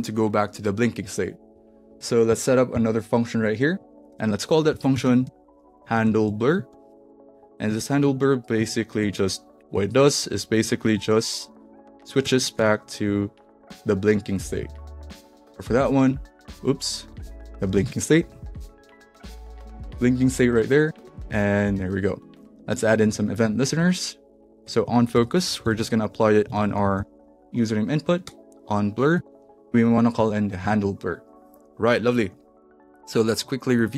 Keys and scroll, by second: 4.1 Return, 4.4-8.9 typing, 8.5 Right, 9.7 alt+Left, 10.9-14.1 typing, 11.3 alt+Right, 14.5 Down, 14.9 Return, 15.3 shift+', 15.7 Down, 16.4 super+z, 17.4-19.8 typing, 23.0 super+c, 25.1 Return, 25.3-27.5 typing, 28.2 Return, 29.2 super+v, 30.6 super+s, 33.7 super+r.